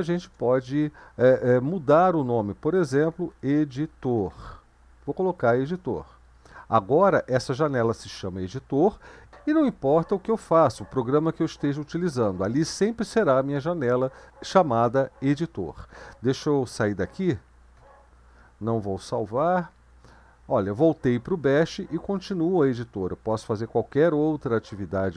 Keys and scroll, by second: 0.0 BackSpace, 0.1 BackSpace, 0.4 BackSpace, 2.7-4.8 typing, 5.7 Return, 17.8 ctrl+x, 19.2 n, 22.9-23.7 typing.